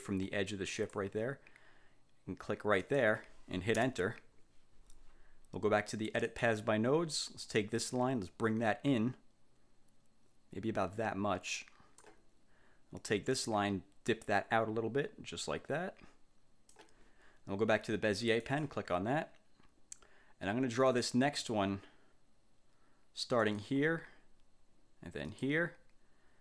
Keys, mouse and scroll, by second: 0.9 click, 2.9 click, 3.9 Return, 6.4 click, 7.9-12.3 drag, 13.5-17.0 drag, 18.5 click, 23.5 click, 25.4 click.